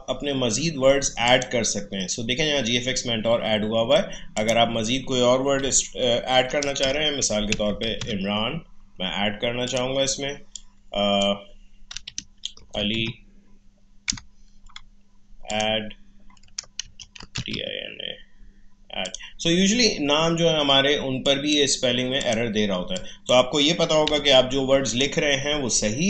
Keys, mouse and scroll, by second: 4.3 click, 6.9-8.5 typing, 9.7-12.0 drag, 12.0-12.9 typing, 14.1 BackSpace, 15.5 click, 16.6-18.0 typing, 19.0 click, 24.0 Delete, 24.9 click.